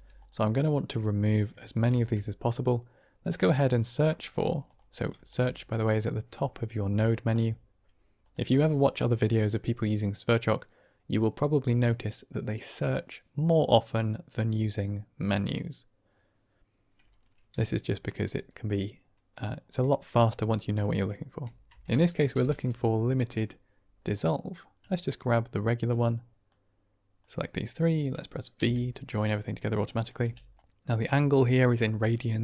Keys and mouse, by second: 1.8 shift+a, 5.1 shift+a, 22.4 i, 26.4-27.2 drag, 28.5 v, 29.0-29.7 middle drag, 29.8 drag, 30.1 g.